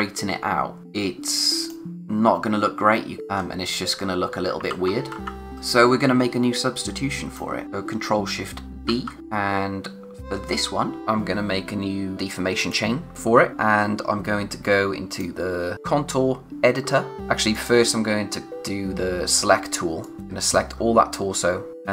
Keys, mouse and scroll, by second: 2.3-3.2 scroll up 1, 3.2 click, 3.2-3.6 scroll down 1, 3.6 click, 3.9-4.5 scroll down 1, 4.7 ctrl+z, 5.5 click, 5.7 space, 8.8 alt+shift+d, 9.2 click, 10.3 scroll up 1, 12.5 click, 15.1 click, 16.8-17.2 scroll down 1, 17.5 click, 20.0 click, 20.6-21.7 scroll up 1, 21.7 click.